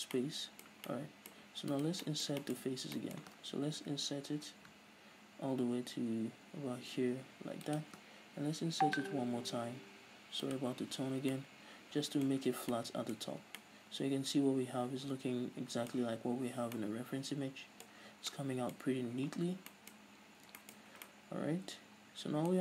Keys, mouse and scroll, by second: 0.0 w, 0.4-1.9 middle drag, 1.9 alt+right click, 2.3-4.1 middle drag, 2.8-3.2 scroll up 2, 8.0 shift+click, 10.8 click, 11.1 z, 11.6-12.6 middle drag, 12.6 z, 13.0-22.6 middle drag, 13.5 Tab, 13.6-13.9 scroll down 2, 18.3 scroll down 2, 19.1 scroll up 2, 19.3-19.7 scroll down 2, 20.2 scroll up 1, 21.0 scroll up 1.